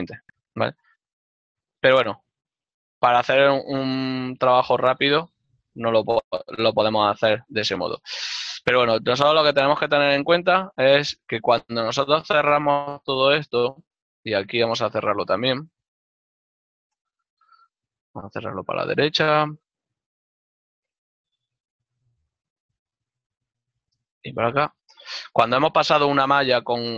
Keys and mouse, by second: 4.3 ctrl+middle click, 7.9 f, 11.5 ctrl+z, 14.8 f, 17.8 middle click, 21.9 f, 23.7 middle click.